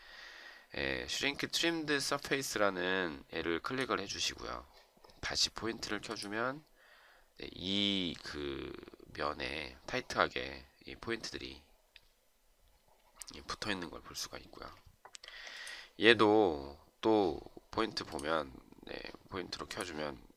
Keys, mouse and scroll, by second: 15.0 Escape.